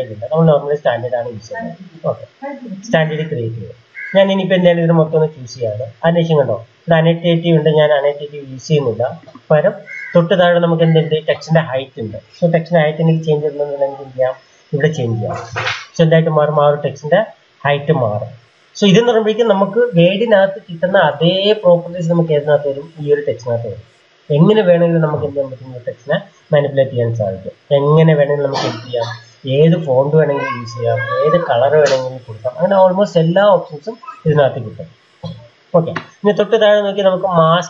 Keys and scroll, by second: 14.0-14.7 typing.